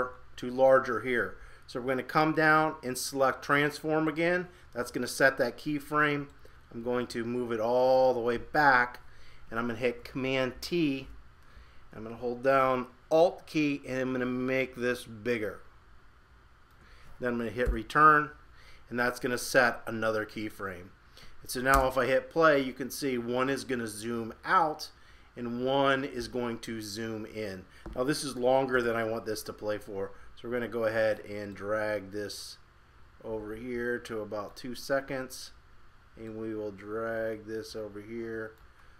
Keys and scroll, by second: 10.5 super+t.